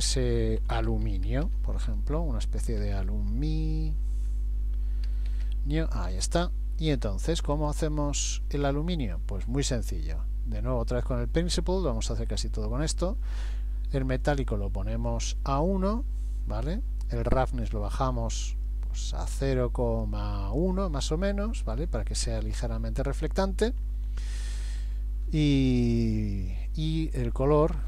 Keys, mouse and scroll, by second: 8.3-10.0 scroll down 3, 14.3 click, 15.6-16.7 scroll down 1, 17.3-17.7 scroll down 1, 17.7 click, 27.2 click.